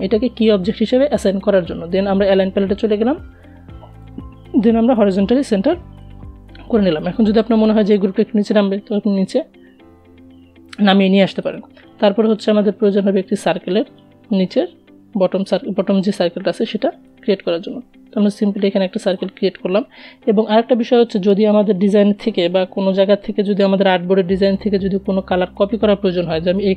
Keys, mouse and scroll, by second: 0.7 click, 7.2 Down, 9.8 click, 15.4 click, 15.4-26.7 alt+drag.